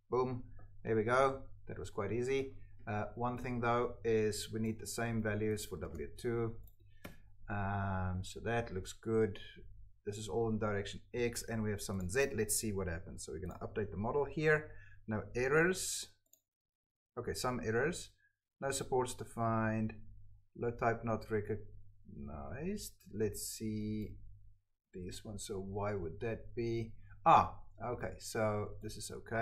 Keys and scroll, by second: 4.8 ctrl+c, 7.0 Escape.